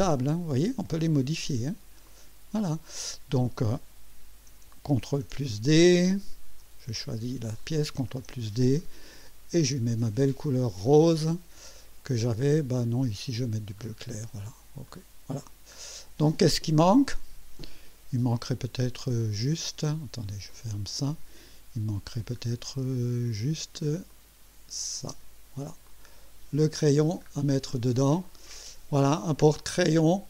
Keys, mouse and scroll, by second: 2.0 click, 5.0 ctrl+d, 7.6 click, 8.0 ctrl+d, 10.8 click, 13.7 click, 14.8 click, 15.4 click, 18.4 click, 20.5 click, 22.1 scroll down 1, 22.6 scroll up 1, 24.1 click, 25.0 space, 25.8-26.6 drag, 26.7-27.1 scroll down 1, 27.6 click, 28.2-29.1 drag, 29.4-30.2 drag.